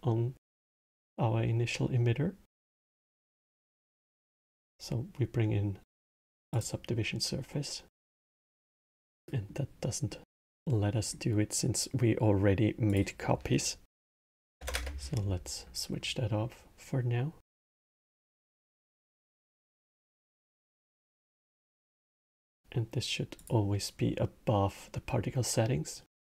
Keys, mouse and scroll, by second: 0.5 click, 2.2 click, 6.2 click, 7.2-9.0 drag, 9.0-12.6 middle drag, 12.6-15.8 drag, 18.1-26.2 drag.